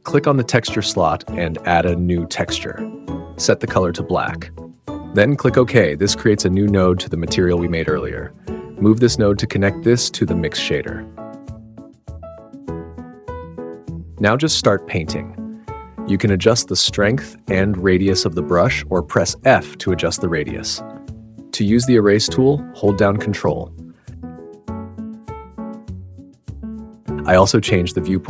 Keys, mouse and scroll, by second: 0.0 n, 0.2-6.6 drag, 7.9 click, 16.9 click, 17.4 click, 19.0 f, 20.2 click, 22.5 click, 23.4-24.2 drag, 24.4 click, 24.9 click, 25.1-27.4 middle drag, 27.4 click, 28.0 super+z, 28.0-28.2 drag.